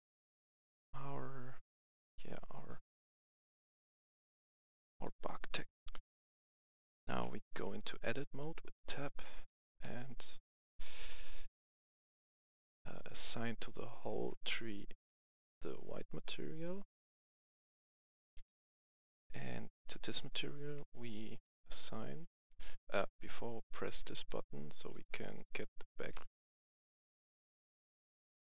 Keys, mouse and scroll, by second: 5.7 F11, 6.2 click, 7.4 Tab, 9.3 a, 9.7 c, 10.8 right click, 11.0 a, 12.6 click, 19.3 scroll up 1, 21.6-22.4 typing, 22.9 right click, 23.8 click, 26.1 c, 26.6-28.5 drag.